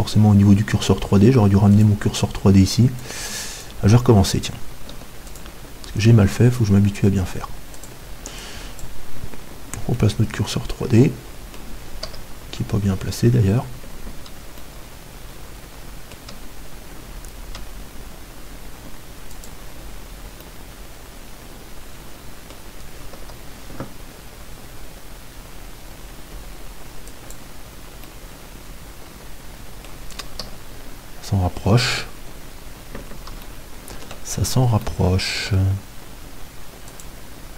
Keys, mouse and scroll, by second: 1.7-11.6 drag, 4.9 x, 7.8-11.9 middle drag, 12.1 KP_3, 14.7 middle click, 19.3-21.2 drag, 23.2 KP_7, 27.1-29.7 drag, 28.1-30.4 middle drag, 30.4 KP_3, 33.8-37.5 middle drag, 36.9-37.5 drag.